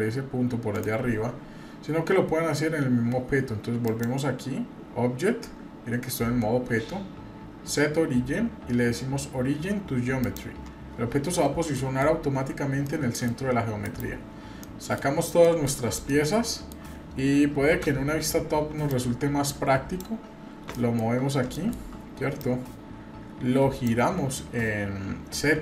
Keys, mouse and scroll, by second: 3.8-10.3 drag, 11.1-11.8 scroll up 2, 11.8 middle click, 12.8-13.3 middle drag, 13.3 scroll down 1, 13.8 KP_Divide, 14.3-14.6 scroll down 2, 14.6-15.0 middle drag, 15.1 scroll down 1, 15.4-15.7 shift+middle drag, 15.8 scroll up 1, 16.1-16.7 middle drag, 17.6 KP_7, 18.9-20.0 drag, 20.2-20.6 scroll up 2, 20.7 shift+middle click, 21.1 shift+scroll up 1, 21.5 shift+middle click, 22.4-23.9 drag.